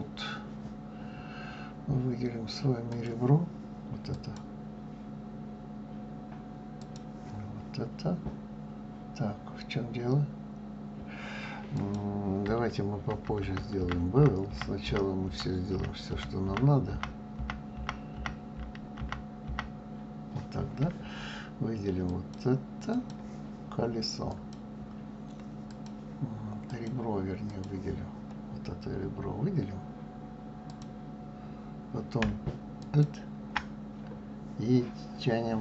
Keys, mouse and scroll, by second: 2.9 click, 4.1 click, 5.2 scroll up 2, 6.2-6.8 scroll down 1, 6.8 click, 11.7 click, 13.1 ctrl+z, 13.4 ctrl+z, 13.8 ctrl+z, 14.2 ctrl+z, 14.4 ctrl+z, 14.8 ctrl+z, 15.2 ctrl+z, 15.7 ctrl+z, 16.0 ctrl+z, 16.4 ctrl+z, 16.9 ctrl+z, 17.4 ctrl+z, 17.8 ctrl+z, 18.6 ctrl+z, 19.0 ctrl+z, 19.4 ctrl+z, 22.1 click, 22.9 click, 24.3-25.8 drag, 26.7-28.9 drag, 28.9-30.7 scroll up 1, 30.7 click, 32.8 alt+click, 33.9 scroll down 1.